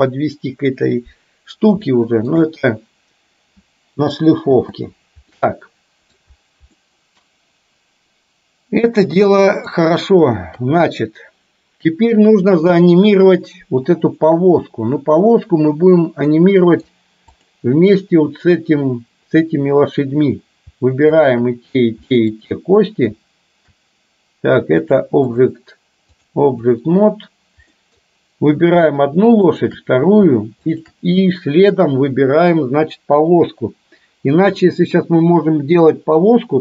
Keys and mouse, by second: 1.8 shift+middle click, 4.7 space, 5.4-6.2 middle drag, 6.8-9.8 middle drag, 10.6 KP_3, 16.4-16.9 middle drag, 21.2 shift+click, 22.1-22.4 middle drag, 24.9 click, 26.3-26.8 drag, 27.8 middle click, 30.8 shift+click.